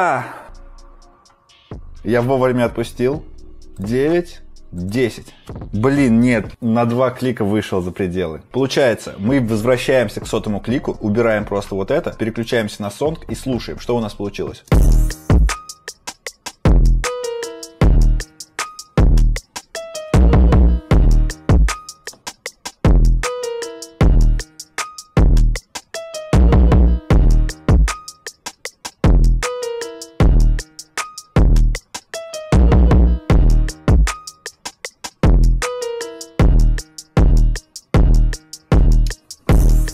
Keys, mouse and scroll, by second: 3.8 click, 11.2 right click, 12.4 click.